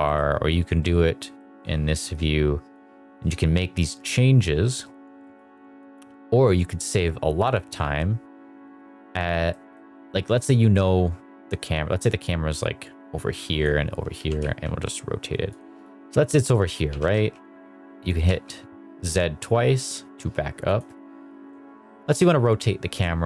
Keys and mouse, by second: 0.5 drag, 1.1 middle drag, 1.8 shift+middle drag, 2.6 click, 5.3 click, 6.5 KP_0, 7.7 g, 9.4 middle drag, 10.4 middle click, 11.8 click, 13.1 click, 14.0 r, 14.3 z, 15.4 click, 15.6 KP_0, 16.8 g, 17.0 z, 18.1 z, 20.6 click.